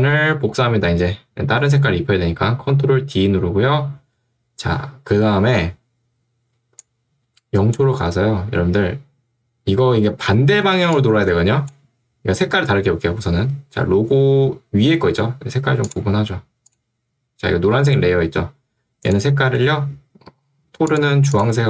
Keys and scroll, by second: 3.3 ctrl+d.